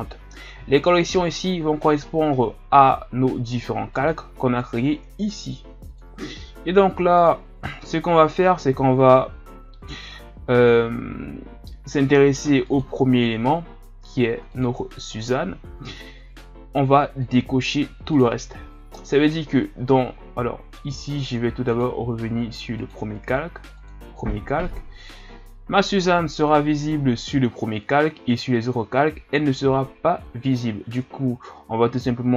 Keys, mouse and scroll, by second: 3.9-6.0 drag, 7.2 click, 12.6 click, 14.5 click, 15.2-17.4 drag, 18.2 click, 21.2 click, 21.7 click, 22.7-29.7 drag.